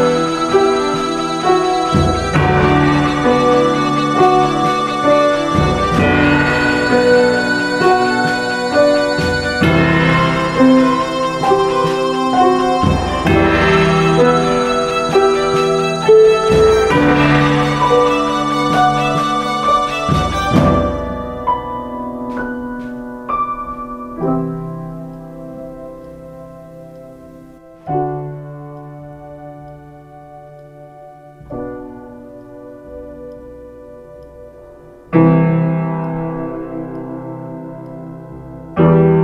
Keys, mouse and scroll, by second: 7.5 ctrl+z, 25.0 ctrl+space, 30.2 ctrl+space.